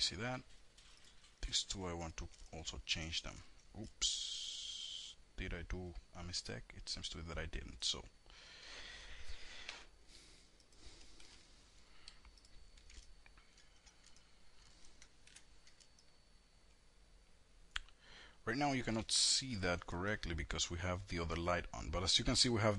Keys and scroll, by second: 10.1 KP_Enter, 14.2 F4, 18.4 shift+F4.